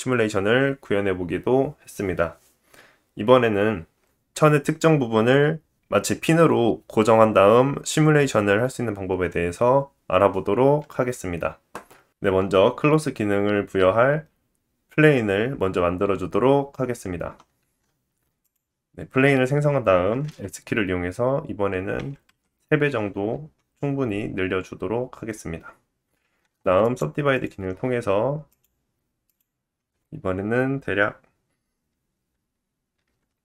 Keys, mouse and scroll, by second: 17.6 shift+a, 20.3 s, 23.3-26.8 middle drag, 23.3-26.3 scroll up 1, 26.4 Tab, 26.8-28.5 right drag, 28.6 click, 29.3 click.